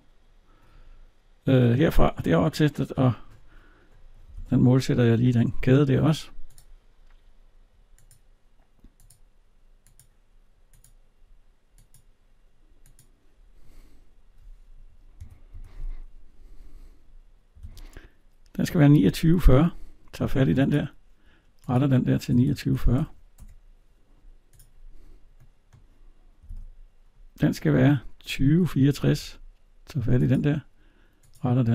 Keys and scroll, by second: 4.1 alt+Tab, 15.0 Escape, 17.4 alt+Tab, 23.1 Return, 26.2 alt+Tab.